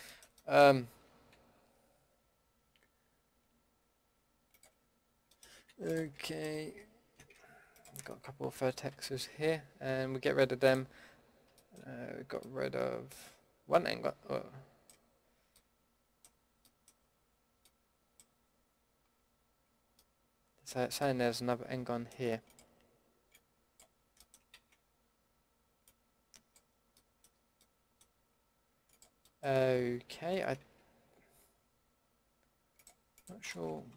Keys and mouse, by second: 4.9-6.2 middle drag, 8.9 ctrl+x, 15.6-20.0 middle drag, 20.0 middle click, 20.4-21.2 middle drag, 22.5-24.5 drag, 24.5 ctrl+z, 28.9 click, 29.2 middle click, 29.3 click, 30.6 ctrl+z, 33.8 Delete.